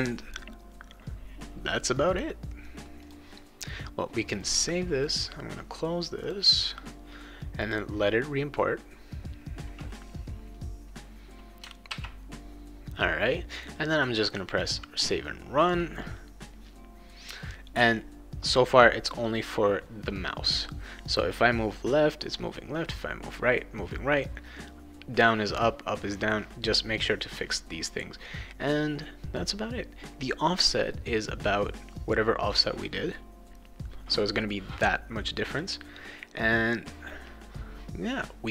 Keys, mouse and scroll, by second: 3.0 click, 5.0 click, 6.2 click, 7.6 click, 11.9 ctrl+s, 13.5 click, 14.6 click, 20.5 click.